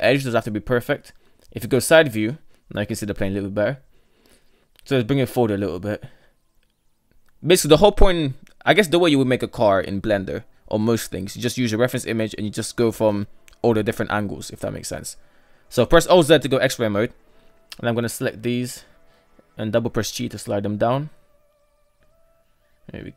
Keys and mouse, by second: 0.3 KP_3, 1.3 shift+middle click, 3.7 g, 7.6 KP_1, 8.8 KP_3, 10.3 Tab, 11.1 shift+middle click, 14.3 alt+z, 15.5 KP_1, 16.1 right click, 16.7 right click, 17.3 shift+right click, 18.1 g, 22.1 shift+middle click, 22.8 middle click.